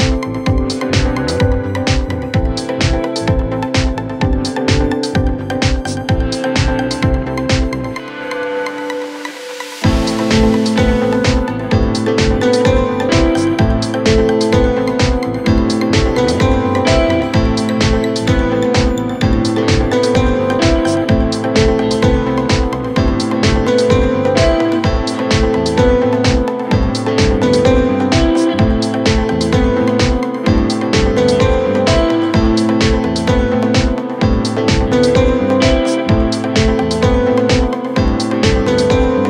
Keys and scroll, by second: 24.3 F3, 29.8 c, 30.2 Escape, 30.4 F3.